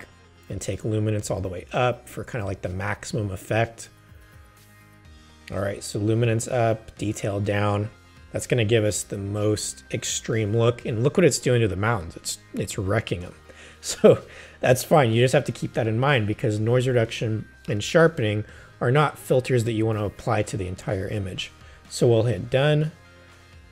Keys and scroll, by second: 9.0 super+0.